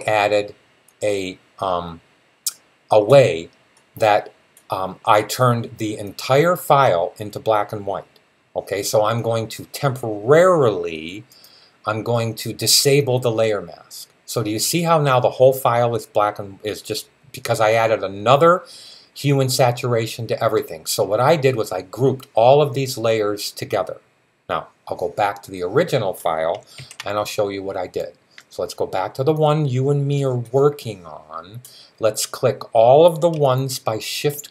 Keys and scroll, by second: 26.6 super+z.